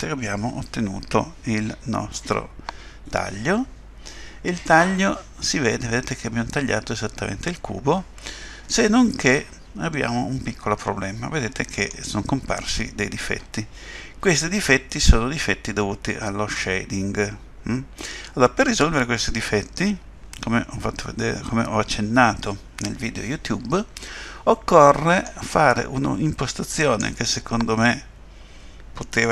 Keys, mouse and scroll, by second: 4.7 middle click, 13.2 middle click, 26.8 click.